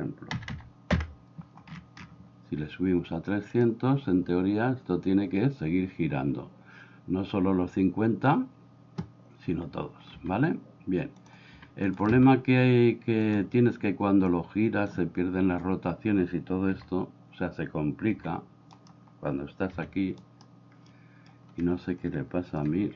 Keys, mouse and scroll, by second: 0.5 0, 3.5 click, 9.5 Escape, 10.2 Escape, 11.3 click, 11.9 Escape, 11.9 click, 12.2 Escape, 13.3 click, 14.3 click, 16.7 r, 18.2 r, 20.9 middle click, 22.8 r.